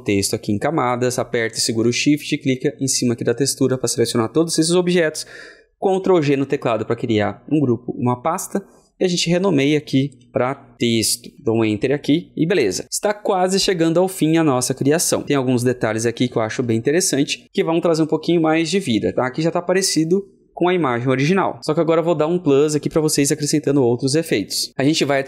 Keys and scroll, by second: 6.0 ctrl+g.